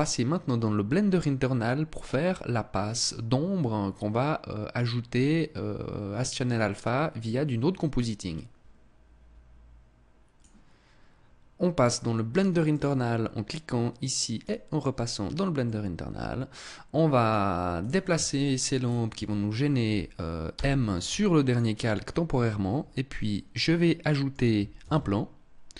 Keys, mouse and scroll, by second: 11.6 click, 12.0 click, 14.9 middle click, 17.1 right click, 17.6 shift+right click, 18.1 shift+right click, 19.9 m, 23.1 middle click, 24.1 shift+a.